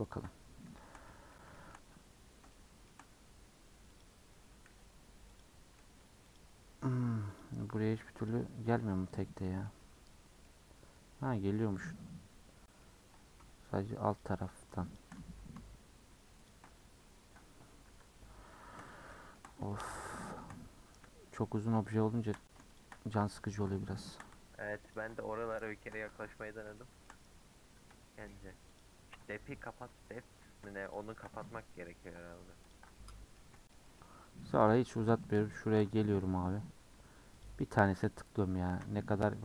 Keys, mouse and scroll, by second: 0.0 ctrl+click, 0.3-0.7 scroll down 4, 0.7 shift+middle click, 2.1 scroll up 1, 2.5 shift+middle click, 3.9 ctrl+click, 4.7 ctrl+z, 5.3 ctrl+click, 5.8 ctrl+z, 6.2 ctrl+click, 6.8 ctrl+z, 7.3 ctrl+click, 7.8 ctrl+z, 8.2 ctrl+click, 8.9 middle click, 9.2 scroll down 2, 9.4-11.3 middle drag, 11.3-11.9 scroll up 2, 11.9-14.1 shift+middle drag, 14.1 shift+click, 14.8 shift+click, 16.4 shift+click, 16.7-17.1 scroll up 1, 17.1-17.9 scroll down 1, 17.9 KP_Decimal, 18.4-19.1 scroll up 7, 19.1-20.6 shift+middle drag, 20.6-21.8 scroll up 1, 21.8 shift+click, 22.7 shift+click, 24.8 ctrl+click, 25.1-26.5 middle drag, 26.5 scroll up 1, 26.7 shift+middle click, 27.4-28.7 scroll up 1, 28.7 ctrl+click, 30.8 ctrl+click, 32.6 ctrl+click, 32.9-34.8 middle drag, 34.8 shift+scroll down 1, 34.9 shift+middle click, 35.8-37.3 scroll up 5, 37.3 ctrl+click, 38.4-38.9 scroll down 5, 39.1 u.